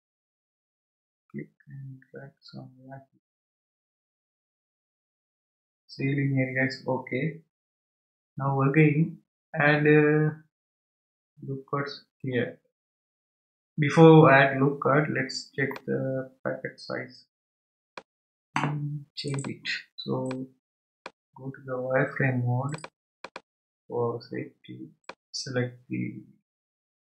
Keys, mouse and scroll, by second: 14.9 scroll down 2, 15.7 scroll down 1, 15.7-18.7 middle drag, 19.3-20.4 drag, 22.7 click, 23.5 click, 25.0 click.